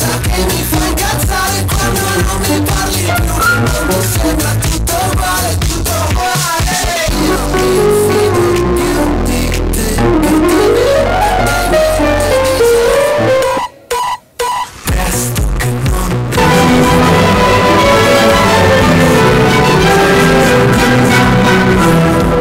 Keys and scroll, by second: 5.2 Page_Down, 13.6 Page_Down.